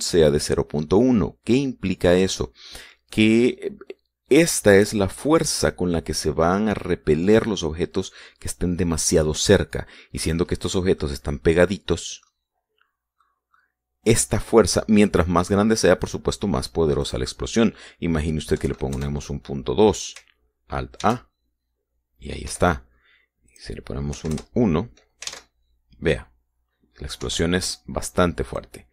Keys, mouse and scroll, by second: 11.0-11.7 scroll up 1, 11.8-13.2 drag, 11.8-13.2 right drag, 13.4-14.0 scroll down 1, 14.0 middle click, 17.8 click, 19.4 KP_Decimal, 19.7 KP_Enter, 21.8 alt+a, 23.3 Escape, 24.3 click, 24.9 KP_1, 25.1 KP_Enter, 26.1 alt+a, 28.0 Escape.